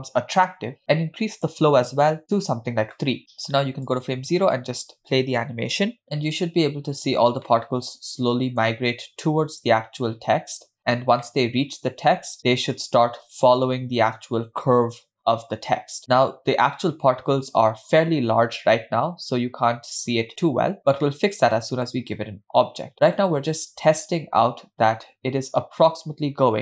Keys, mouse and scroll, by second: 1.3-2.6 drag, 3.9 click, 4.6 space, 7.9-9.5 middle drag, 10.4 middle click, 10.6 scroll up 1, 11.7 shift+middle click, 15.0-15.6 middle drag, 21.1-21.4 scroll down 1, 21.5-22.4 middle drag.